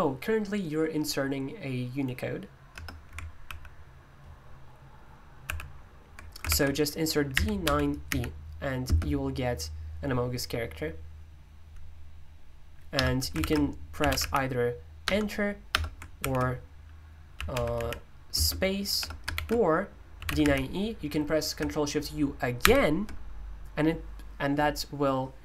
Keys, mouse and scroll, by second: 2.7 BackSpace, 3.4 super+l, 5.4 super+h, 6.4 ctrl+u, 7.1-8.8 typing, 12.9-14.7 typing, 13.4 ctrl+u, 15.0 Return, 16.2 ctrl+u, 17.2-18.9 typing, 19.3 ctrl+u, 20.0-20.9 typing, 22.6 ctrl+u.